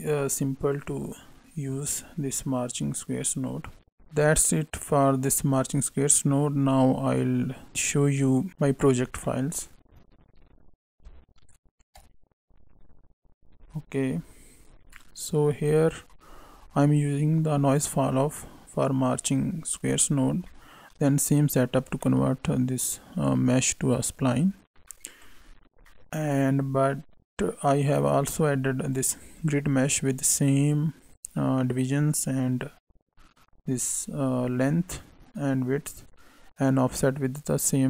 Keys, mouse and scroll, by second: 2.3 middle click, 3.6 scroll down 3, 3.9 click, 9.0 scroll down 2, 9.2 middle click.